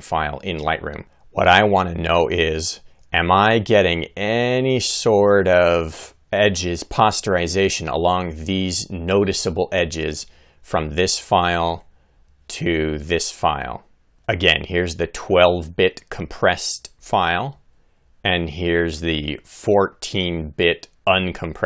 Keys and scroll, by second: 0.7 Right, 17.9 Right.